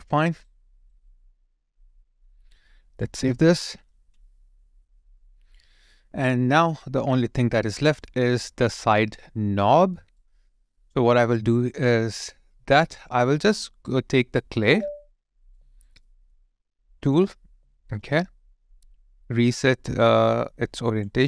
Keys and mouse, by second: 0.3 alt+right click, 1.1 alt+click, 3.9 ctrl+s, 8.0 alt+right click, 15.5 alt+right click, 16.0 alt+middle click, 17.4 alt+middle click, 17.7 alt+click.